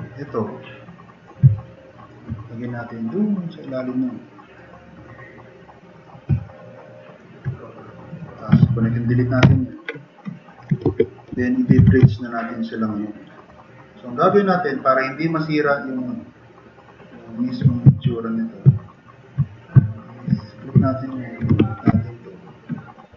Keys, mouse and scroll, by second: 6.4-7.1 drag, 9.5 ctrl+shift+e, 10.4 click, 11.8 3, 12.1-12.6 drag, 12.8-13.2 drag, 14.0 drag, 15.2-16.3 drag, 16.9-17.3 drag, 18.8 click, 19.8 middle click, 19.9 click, 20.9 click, 21.6 click, 22.0 drag, 22.4 click.